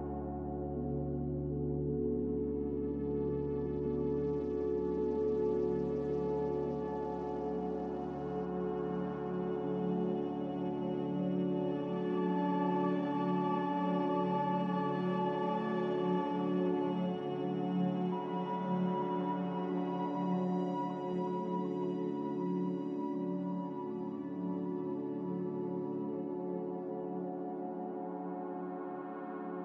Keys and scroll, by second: 11.8 Delete, 15.6 Return, 21.5 Delete, 27.2 Delete, 28.6 ctrl+z, 28.9 ctrl+z.